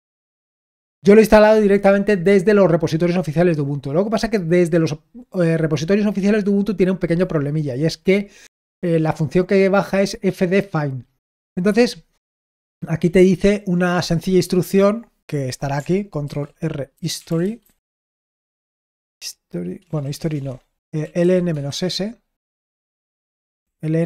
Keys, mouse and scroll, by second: 15.2 click, 16.2 ctrl+r, 16.6-18.0 typing, 19.7-22.4 typing, 23.5 typing.